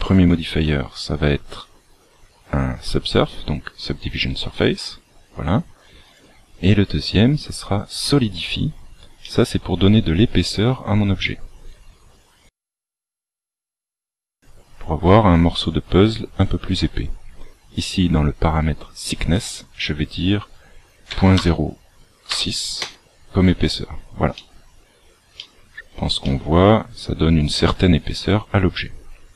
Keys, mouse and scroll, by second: 6.0 click, 9.1 middle click, 10.5 scroll up 2, 11.1 scroll up 1, 11.2 shift+middle click, 19.3 click, 24.3 middle click, 25.3 shift+middle click, 26.1 middle click.